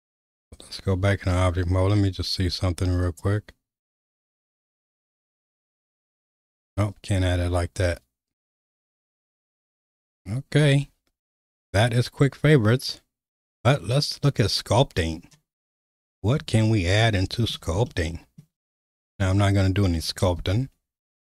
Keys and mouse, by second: 0.9 Tab, 3.2-8.8 right drag, 10.6 n, 14.2 click, 17.0 middle click, 17.9 shift+middle click, 20.6 shift+middle click.